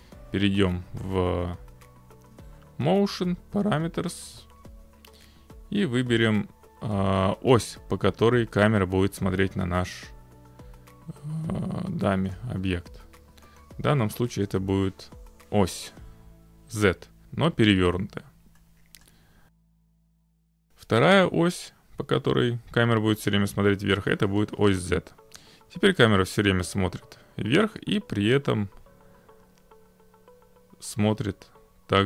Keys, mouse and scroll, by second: 12.4 click, 14.5 click, 16.7 click, 19.0 click, 20.2-21.2 drag.